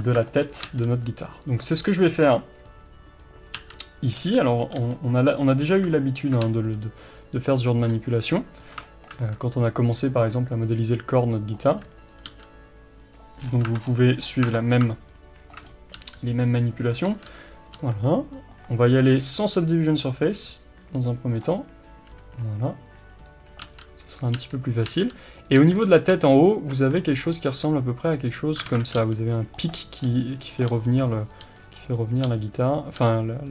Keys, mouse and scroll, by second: 0.3-1.8 shift+middle drag, 0.7 e, 1.8-2.3 scroll down 1, 2.3-3.1 scroll up 1, 3.6 e, 4.1 click, 4.2 r, 4.8 g, 5.7 scroll down 1, 6.0-7.6 shift+middle drag, 6.5 e, 7.6 click, 7.7 r, 8.3 click, 8.8-10.8 shift+middle drag, 9.2 e, 11.7 r, 12.3 g, 13.4-14.1 scroll down 2, 13.7 Tab, 14.2-14.9 scroll up 2, 14.6 Tab, 14.9-17.1 shift+middle drag, 15.7-16.0 scroll up 1, 16.0 r, 17.1 e, 21.4 click, 22.1 r, 24.3 click, 24.4 r, 26.0 click, 26.1 e, 28.4 click, 28.7 alt+a, 29.3 click, 30.1 g, 31.9 click, 32.3 g, 33.0 click, 33.0 g.